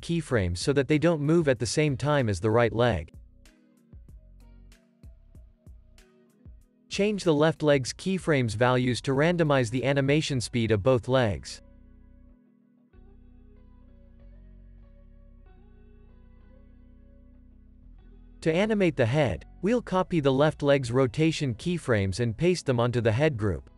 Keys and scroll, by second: 2.2 space, 5.5 space, 11.2 space, 21.0 super+c.